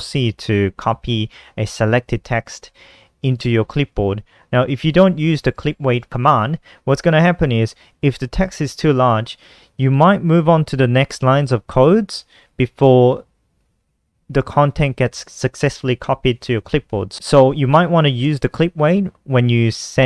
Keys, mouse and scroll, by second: 5.2 Return, 5.3-7.2 typing, 9.8 Down, 10.2 Down, 11.6 click, 12.1 Down, 12.3 Down, 16.1 Up, 16.2 Up, 16.3 Up, 16.5 Up, 16.9 End, 17.2 Return, 17.2 Return, 17.9 Down, 18.6 shift+End, 19.9 Right.